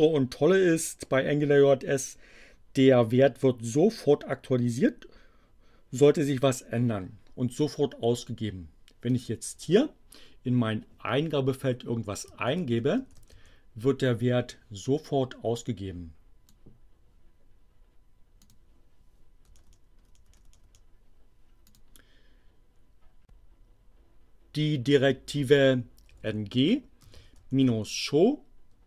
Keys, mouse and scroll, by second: 9.1 click, 12.2-13.8 typing, 15.0-16.6 drag, 18.4 click, 19.5 BackSpace, 21.7 click, 26.1-28.1 typing.